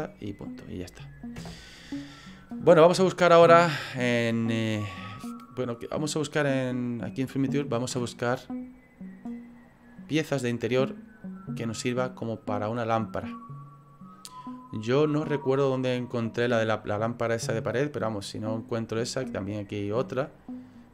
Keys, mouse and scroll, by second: 0.2 middle click, 1.4 KP_0.